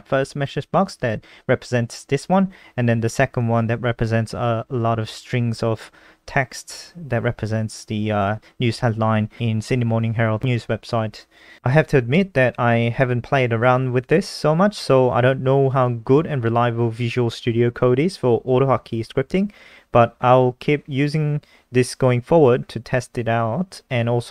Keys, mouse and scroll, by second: 5.5 alt+click, 6.2 alt+click, 6.8 alt+click, 8.7 click, 9.6-10.4 scroll down 7, 10.4-13.0 scroll up 9.